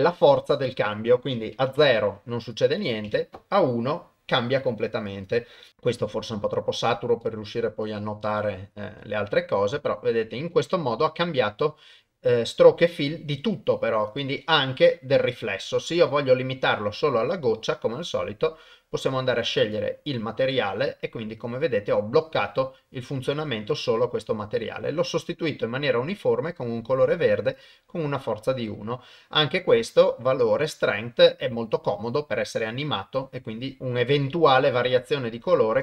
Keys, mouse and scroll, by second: 1.0 click, 2.7 click, 5.2 click, 14.1 click, 17.3-19.8 drag, 27.7-35.5 drag.